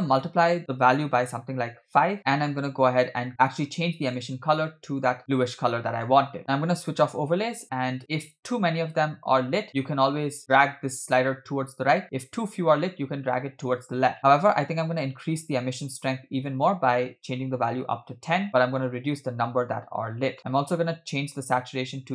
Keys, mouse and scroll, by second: 0.4-2.2 drag, 6.4-6.8 scroll down 2, 6.9 click, 9.8-15.8 drag, 16.4-17.9 drag, 18.5 click, 20.4 middle click, 20.4 scroll down 2, 20.7 click.